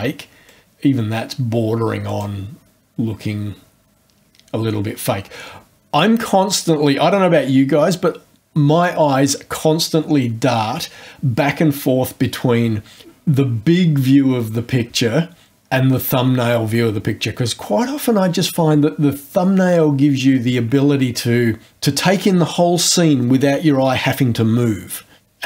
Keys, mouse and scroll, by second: 0.4 click, 2.0 click.